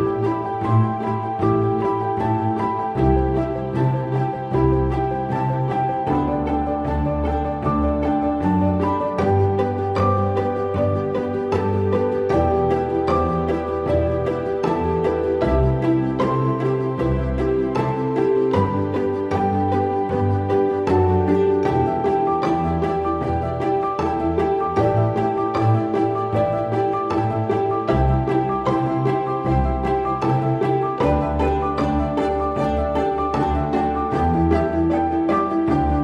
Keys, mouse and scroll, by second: 25.8 double click, 28.5 right click, 32.8 typing.